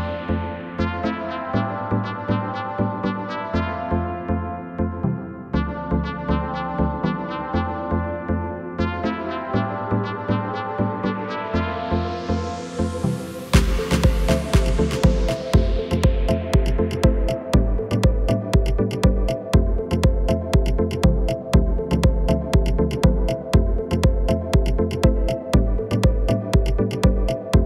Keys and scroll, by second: 2.7 shift+e, 7.5 Tab, 12.8 |, 18.5 Tab.